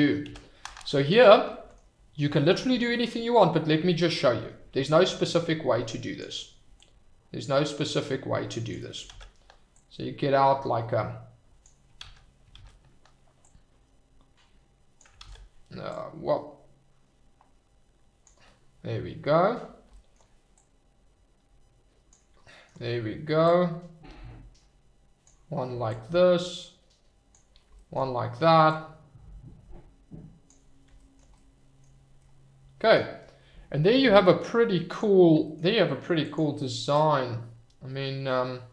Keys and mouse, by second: 0.4 ctrl+z, 1.1 middle click, 1.7 middle click, 4.2-6.1 drag, 6.8-8.7 drag, 9.2 ctrl+z, 9.9-11.6 drag, 12.1 ctrl+z, 12.7 ctrl+z, 13.6-15.0 drag, 15.3 ctrl+z, 16.1-18.2 drag, 20.7-22.2 drag, 23.6-25.2 drag, 26.2-27.3 drag, 27.9 shift+middle click, 28.9-30.6 drag, 31.3 middle click, 32.1 middle click, 34.9 click, 36.2 click, 37.1-38.7 drag.